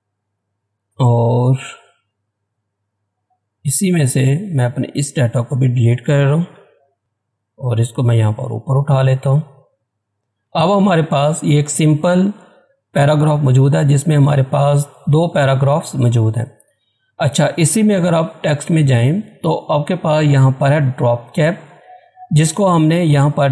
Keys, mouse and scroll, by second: 0.2 click, 2.2-2.6 scroll up 1, 3.2-4.5 scroll down 1, 4.5-6.5 drag, 6.5 Delete, 7.0-9.7 drag, 9.7-10.3 scroll down 1, 10.3 scroll up 1, 12.7 scroll down 1, 13.2 scroll up 1, 18.7 click.